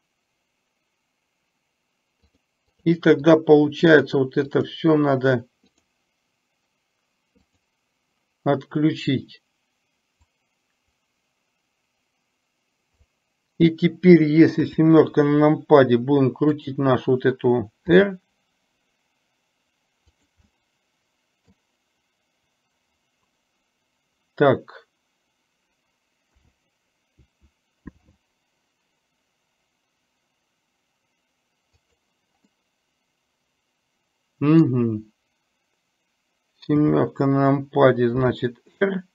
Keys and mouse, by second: 2.7 click, 3.9 click, 4.6 click, 5.8 click, 10.4-13.1 drag, 16.8 click, 18.1 r, 20.6-21.6 middle drag, 28.2 r, 32.7-33.4 middle drag, 33.8-34.7 middle drag, 38.3 r.